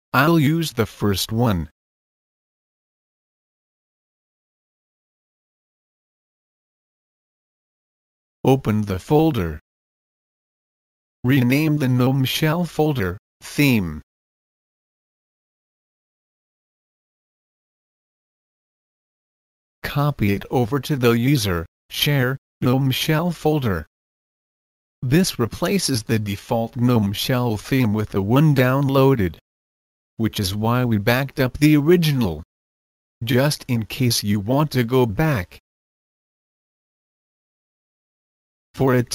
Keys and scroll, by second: 14.7-16.2 typing, 16.4 Return.